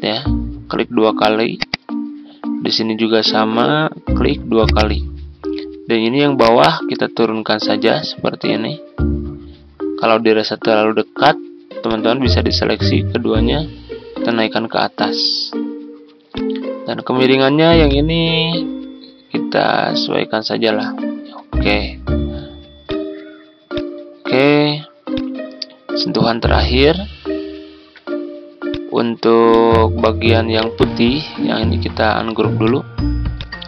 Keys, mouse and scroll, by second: 13.3 Up, 13.5 Up, 13.7 Up, 14.1 typing, 16.3-21.2 drag, 22.8 click, 24.0 scroll down 1, 25.7-29.4 drag, 30.5 right click, 32.6 click.